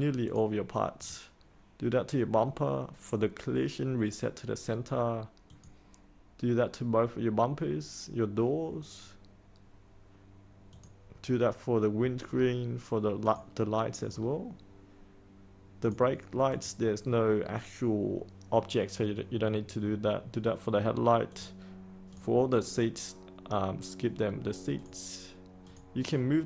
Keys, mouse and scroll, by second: 12.2-13.2 scroll down 1, 13.2 click, 14.0-15.8 scroll down 1, 15.8 click.